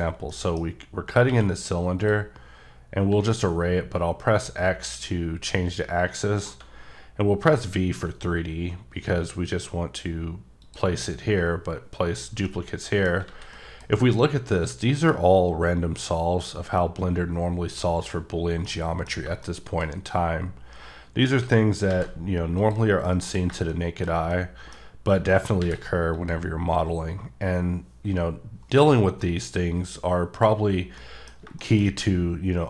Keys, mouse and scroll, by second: 0.3 middle click, 0.7 scroll up 1, 1.2 q, 2.0 click, 3.0 x, 7.4 v, 8.4-10.1 scroll up 3, 10.6 click, 12.4 middle click, 13.2 a, 13.5 middle click, 18.7 middle click, 21.9 alt+v, 22.6 click, 23.0 middle click, 25.6 v, 26.1 click, 31.0 middle click, 31.7 shift+scroll up 2.